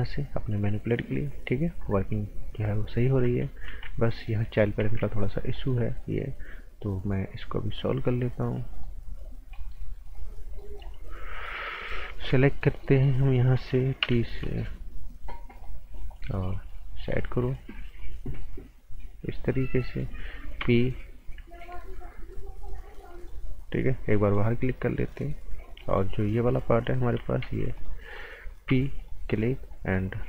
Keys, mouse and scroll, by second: 4.1 right click, 4.3-4.6 scroll up 1, 4.8 z, 5.5 click, 6.3-7.8 scroll down 1, 7.8 click, 9.4 scroll up 1, 9.5 right click, 10.1 click, 10.4 scroll up 1, 10.6 right click, 12.3 p, 12.5 scroll up 1, 12.8 right click, 14.0 t, 14.2 scroll up 1, 14.4 right click, 15.6 click, 17.0 right click, 18.0 click, 19.6 scroll down 1, 19.8 right click, 20.6 p, 21.2-21.6 scroll up 1, 21.6 right click, 23.1 click, 25.4-25.8 scroll down 1, 25.8 right click, 26.9-28.6 typing, 27.7 click, 29.0 click.